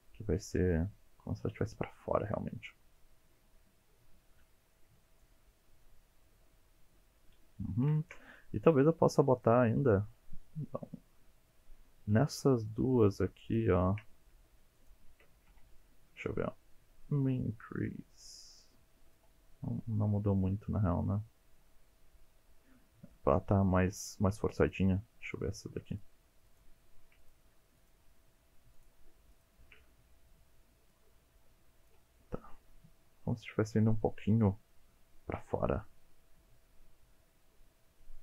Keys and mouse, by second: 0.3 g, 1.6 click, 3.0-4.7 middle drag, 4.9 Tab, 5.2-7.5 middle drag, 7.6 Tab, 8.0 shift+middle click, 8.6 2, 9.3 click, 13.5 shift+click, 14.1 middle click, 14.8 shift+click, 15.5 alt+z, 15.8 middle click, 17.4-19.2 drag, 19.7-22.8 middle drag, 25.9 click, 26.5 shift+click, 27.2 click, 27.8 shift+click, 28.8 shift+click, 29.3 shift+click, 30.9-31.9 drag, 32.1-34.4 middle drag, 35.4 alt+z, 35.8-38.2 middle drag.